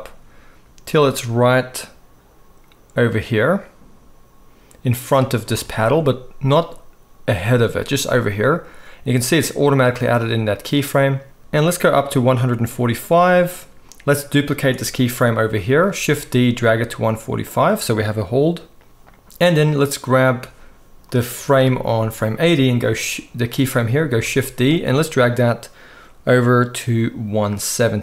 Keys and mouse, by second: 5.4-9.2 middle drag, 9.2-17.7 drag, 16.0 shift+d, 17.7-19.4 middle drag, 19.4-28.0 drag, 24.2 shift+d.